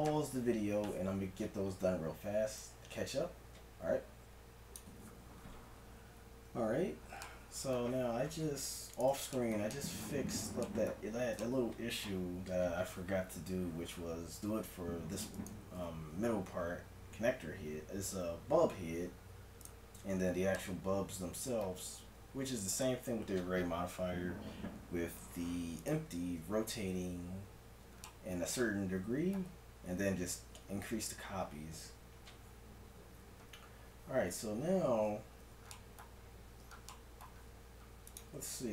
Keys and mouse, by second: 4.8 KP_1, 8.9-10.8 right drag, 10.8-15.3 middle drag, 15.5-17.3 right drag, 19.7 click, 20.6-21.6 right drag, 21.6-25.8 middle drag, 25.8-27.4 right drag, 27.4 middle click, 31.3-38.6 middle drag.